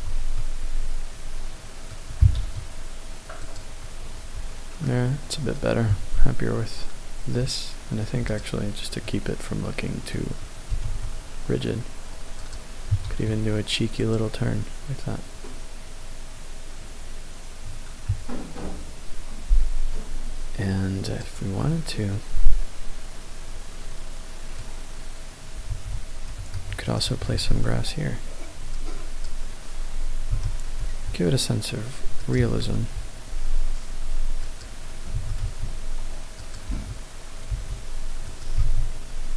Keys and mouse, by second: 0.4-2.0 middle drag, 2.2 KP_0, 3.4 click, 8.3 click, 10.7 r, 10.9 z, 12.5 click, 13.0 KP_0, 14.0 click, 22.7-25.5 drag, 25.7 shift+a, 27.0 shift+click, 30.3 s, 30.9 x, 32.3 click, 32.4 s, 32.8 y, 34.5 click, 35.1 s, 35.5 x, 36.4 click, 36.7 g, 37.5 y, 38.6 g, 38.7 x.